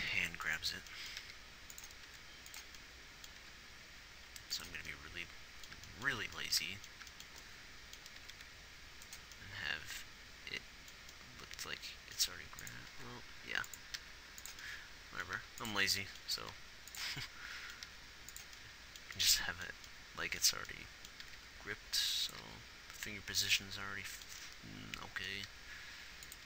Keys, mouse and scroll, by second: 0.6 a, 1.3 middle click, 1.6 g, 2.5 r, 3.8 g, 6.8-8.6 drag, 8.6 r, 12.0 r, 12.8 g, 13.3 r, 14.3 g, 15.7 g, 16.8 r, 18.2 g, 21.6 r, 22.8 g, 25.8 g.